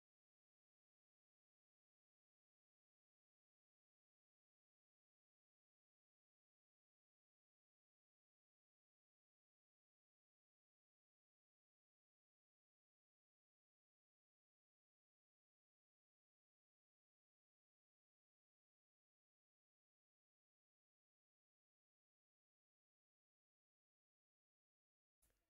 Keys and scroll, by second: 1.9 6, 2.5 Return, 4.0 t, 4.5 Return, 6.6 3, 7.5 Return, 8.9 t, 9.3 Return, 10.9 1, 11.6 0, 11.8 Return, 13.3 b, 13.6 Return, 15.7 1, 16.9 Return, 17.8 d, 18.2 Return, 24.5 Return.